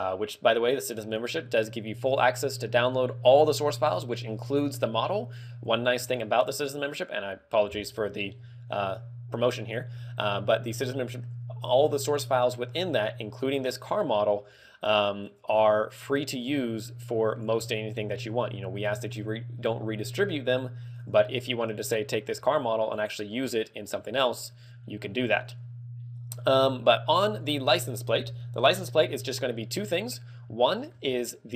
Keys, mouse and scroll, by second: 2.2 click, 8.3-8.9 scroll up 1, 8.9 click, 8.9 scroll up 2, 9.8 click, 10.0-10.4 scroll down 5, 10.4 middle click, 11.5 click, 11.9 scroll down 2, 12.2 middle click, 12.8 scroll down 2, 15.5 click, 17.0 click, 17.7-18.4 scroll up 8, 18.4 middle click, 18.9-19.7 scroll up 2, 19.7 middle click, 23.1 click, 27.5 click, 30.8 shift+middle click, 31.2 scroll up 4.